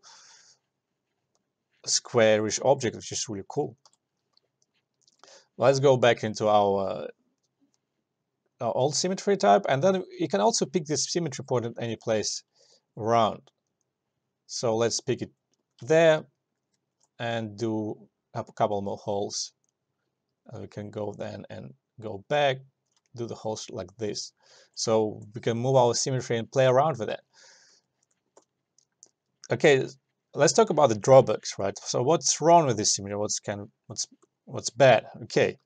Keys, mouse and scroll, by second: 2.7 alt+click, 2.8 alt+right click, 3.0 alt+click, 4.0 s, 5.2-10.2 drag, 12.1 click, 15.3 click, 16.0 alt+middle click, 16.3 alt+right click, 16.9 alt+middle click, 18.7-21.7 drag, 21.7-23.2 drag, 23.2 alt+right click, 23.5 alt+click, 24.1 alt+right click, 24.3 alt+click, 25.1 alt+right click, 27.8 alt+right click, 28.0 alt+middle click, 28.3 alt+click.